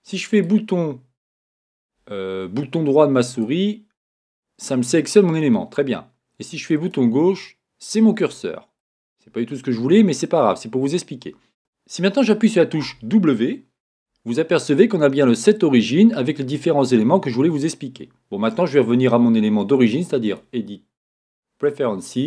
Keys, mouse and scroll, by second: 0.0 click, 0.4 right click, 3.3 right click, 4.1 right click, 4.6 right click, 6.9 click, 21.9-22.2 drag.